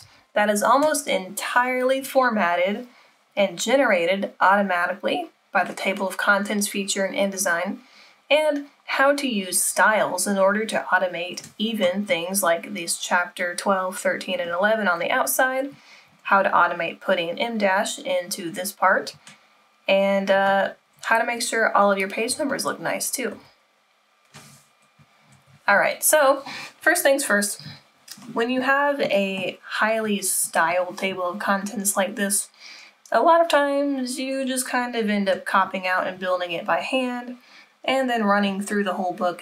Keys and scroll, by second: 0.0 Down, 4.5 Down, 25.3 Escape.